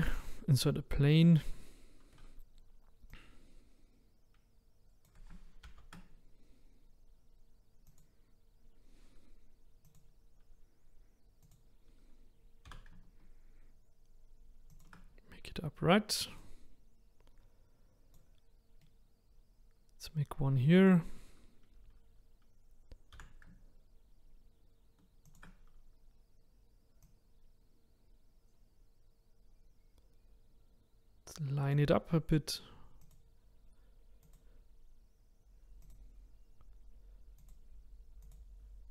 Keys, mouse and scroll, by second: 0.2 shift+a, 3.2 click, 5.6 ctrl+z, 8.6 click, 9.9 click, 12.7 r, 16.4 click, 18.8-20.9 middle drag, 20.9 click, 23.1 r, 27.1 click, 33.1 click, 35.9 click, 37.4 click, 38.3-38.9 drag.